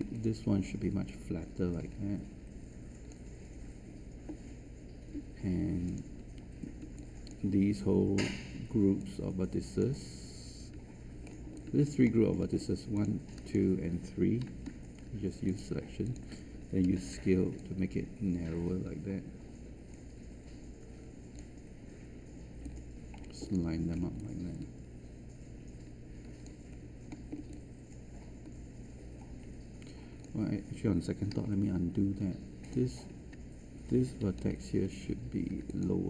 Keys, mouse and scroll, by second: 0.1-6.8 drag, 7.3 alt+click, 8.9 shift+click, 11.2 scroll up 1, 11.5 alt+click, 12.0 alt+middle click, 12.9 click, 14.6 shift+q, 15.4 shift+click, 16.0 shift+click, 16.8 shift+r, 17.5-23.8 drag, 23.8 scroll down 1, 24.1-26.4 alt+drag, 26.6 scroll up 1, 27.0 alt+middle click, 27.8-30.2 alt+drag, 31.3 alt+z, 31.5 alt+z, 32.6 click, 34.4 q, 35.6 click.